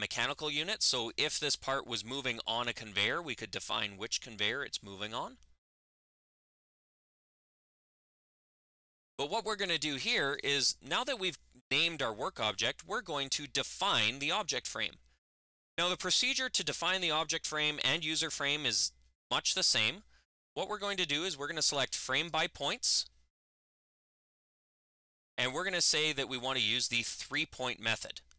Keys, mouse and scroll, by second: 9.1 click, 10.1 click, 22.0 click, 23.5 click, 27.1 click.